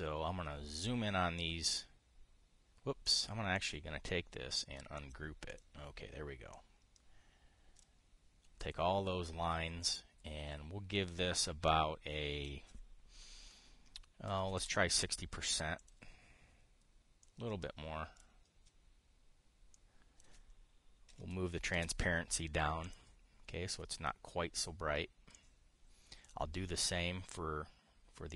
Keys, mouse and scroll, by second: 3.7 click, 4.3 click, 5.7 click, 6.2 click, 7.2-8.6 drag, 12.4 click, 15.0 KP_6, 15.1 KP_0, 15.3 Return, 16.5 click, 17.9-19.0 drag, 20.4 click, 21.8 KP_5, 21.9 KP_0, 22.4 Return, 23.5 click, 26.0-27.1 drag.